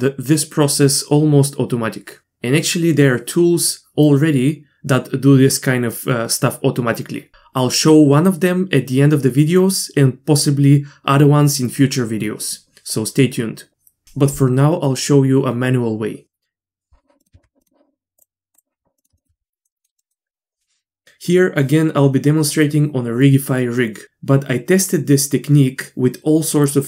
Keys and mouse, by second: 17.2 middle click, 17.3 Tab, 18.2-19.0 drag, 19.0-20.3 middle drag.